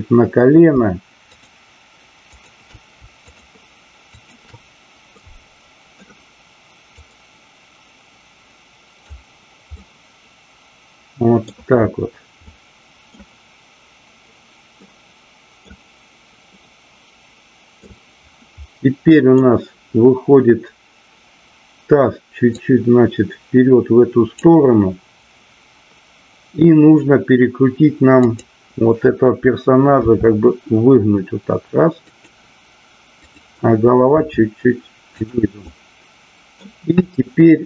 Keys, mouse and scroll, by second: 1.3-1.9 shift+drag, 4.2-5.4 shift+drag, 5.4-5.9 middle drag, 7.0-9.0 drag, 9.8-11.4 middle drag, 12.4-13.1 middle drag, 14.7 middle click, 16.5-17.9 middle drag, 18.8 middle click, 22.4-24.4 drag, 28.1 click, 30.0 r, 32.1 click, 33.1 click, 34.1 r, 35.2 click, 35.5-36.5 middle drag, 37.0-37.6 middle drag.